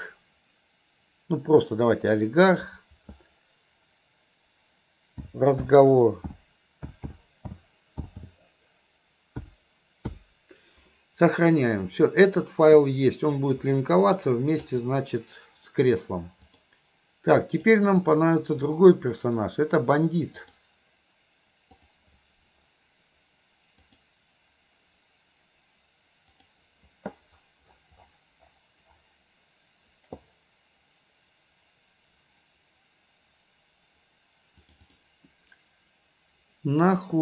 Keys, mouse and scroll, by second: 13.8-14.2 middle drag, 14.7 click, 16.5-17.3 drag, 17.6 click, 20.5-22.1 drag.